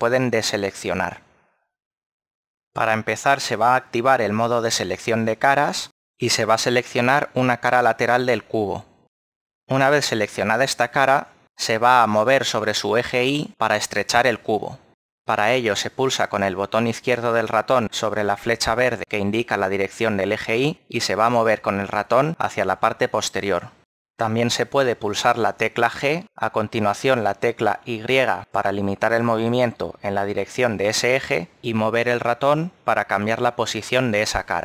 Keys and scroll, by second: 0.5 a, 1.9 a, 25.4 g, 26.6 y.